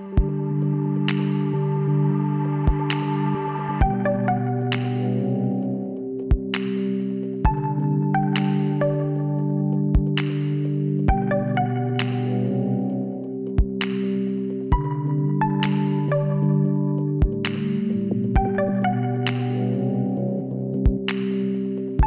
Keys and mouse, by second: 0.2 middle click, 1.7 alt+h, 2.2 middle click, 3.7 a, 11.2 KP_1, 12.1 z, 14.9-16.4 middle drag, 16.4-18.2 drag, 16.8 b, 19.7-21.4 drag, 20.1 b, 21.4 g.